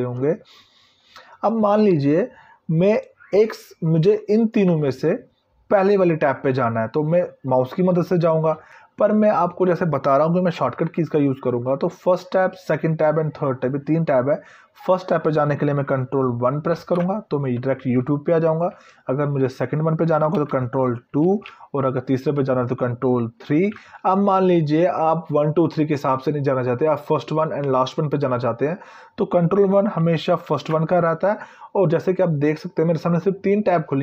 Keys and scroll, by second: 16.4 ctrl+1, 20.9 ctrl+2, 23.1 ctrl+3, 30.1 ctrl+1.